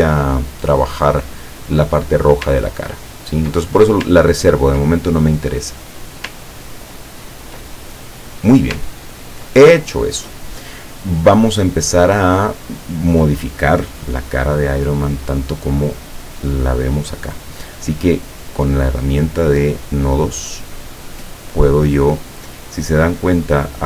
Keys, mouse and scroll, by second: 3.7 ctrl+click, 4.5 ctrl+scroll up 1, 4.9-6.3 ctrl+middle drag, 6.7-7.5 ctrl+scroll down 4, 7.9 ctrl+click, 9.2 ctrl+scroll down 2, 18.5 click, 19.7 click.